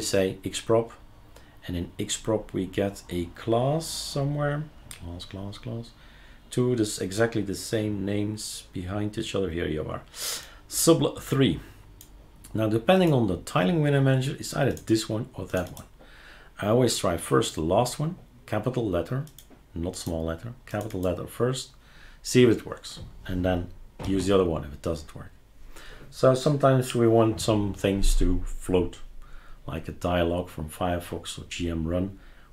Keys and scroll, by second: 24.0 super+q.